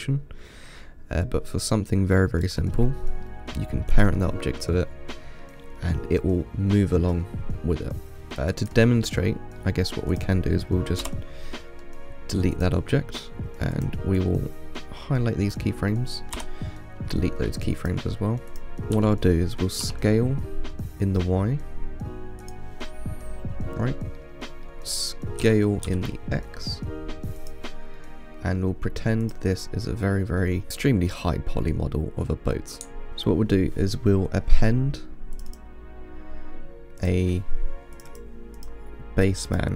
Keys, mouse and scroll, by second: 3.1 scroll up 1, 3.5-4.2 middle drag, 4.2 click, 4.6-5.1 scroll down 4, 5.1-8.2 middle drag, 8.3-8.9 middle drag, 8.9 click, 9.9-10.4 middle drag, 10.4 click, 11.3 Delete, 12.8 click, 14.0 click, 14.4-16.6 drag, 16.6 Delete, 18.1 click, 18.8 click, 19.2 s, 23.1-24.1 middle drag, 24.1-24.4 scroll down 1, 24.4-25.7 middle drag, 25.7 s, 28.2-28.8 middle drag, 28.8-29.5 scroll down 3, 29.5 click, 29.9-30.3 scroll up 2, 30.3-32.0 middle drag, 32.0-32.5 scroll down 2, 32.5-33.1 scroll up 5.